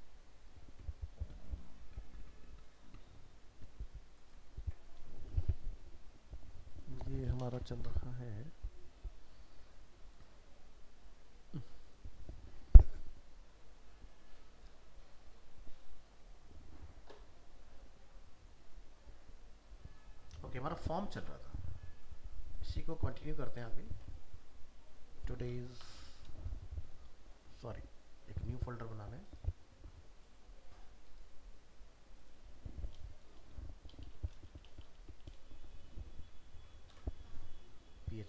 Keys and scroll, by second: 4.6 ctrl+v, 7.5 ctrl+shift+n, 23.9 ctrl+c, 25.8 ctrl+shift+n, 36.9 ctrl+v.